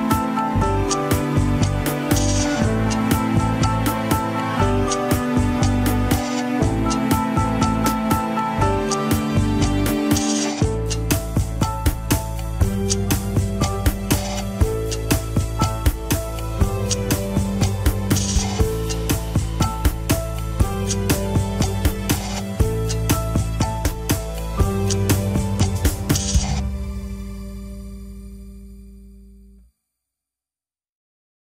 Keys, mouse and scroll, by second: 0.4-0.8 scroll down 2, 0.8 r, 4.7-6.2 middle drag, 6.2 a, 6.6 alt+r, 6.9 alt+g, 7.6 ctrl+Tab, 8.2 ctrl+s, 8.2 alt+z, 9.0 shift+z, 9.7 scroll down 2, 10.0 alt+z, 10.6-11.5 scroll up 11, 11.3 shift+middle click, 11.7 click, 12.4-12.9 scroll down 3, 13.1 shift+click, 14.1 ctrl+p, 15.5 middle click, 16.4 click, 16.8 scroll up 2, 17.3-19.0 shift+middle drag, 19.0 shift+click, 19.5 ctrl+Tab, 20.1-21.1 middle drag, 21.1 ctrl+click, 21.8-23.0 drag, 23.4 click, 23.9 Tab, 24.8 alt+z, 25.8 click, 26.4 click, 29.0 click, 29.7 click, 30.4 Tab, 30.6 KP_1, 30.8 scroll down 2, 31.0 ctrl+Tab.